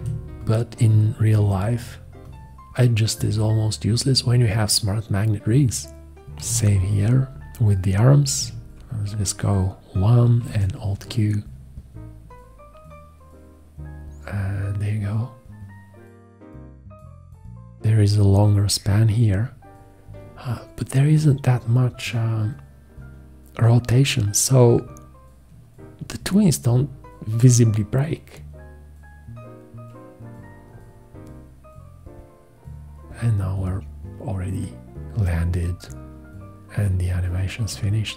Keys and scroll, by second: 0.0 Escape, 0.9 F1, 6.4 v, 8.4 1, 10.4 alt+q.